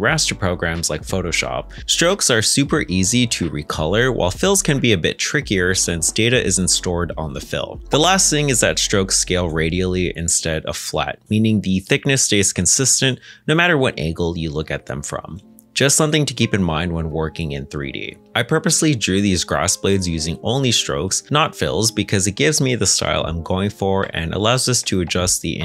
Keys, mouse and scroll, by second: 1.8 middle click, 5.2 ctrl+z, 7.9 middle click, 9.9 ctrl+Tab, 10.4 a, 11.0 middle click, 12.3 alt+s, 15.4 middle click, 16.2 ctrl+z, 18.7 middle click, 21.5 2, 22.0 x, 24.0 shift+middle click, 24.6 middle click, 25.0 shift+middle click.